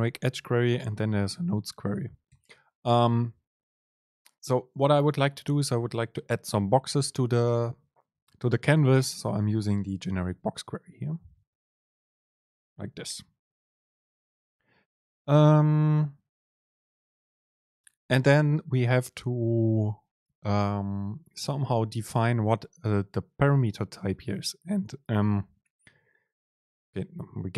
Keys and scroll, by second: 27.2 Down.